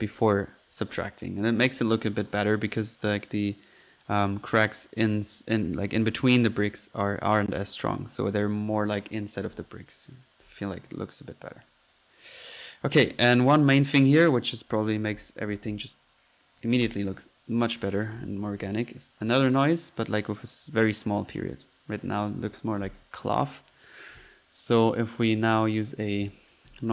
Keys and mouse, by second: 0.1 F1, 4.7 Escape, 5.6 click, 5.8 F1, 6.6 Escape, 7.5 click, 7.9 F1, 8.0-8.8 drag, 11.6 Escape, 11.9 middle click, 12.2-12.7 drag, 13.2-13.6 drag, 14.3-14.7 right drag, 14.7 click, 14.9-16.1 typing, 16.1 click, 17.0 Escape, 17.4 right drag, 17.7 click, 17.9 right click, 18.2-19.1 typing, 19.1-19.5 drag, 19.5 click, 21.4 F1, 22.1 Escape.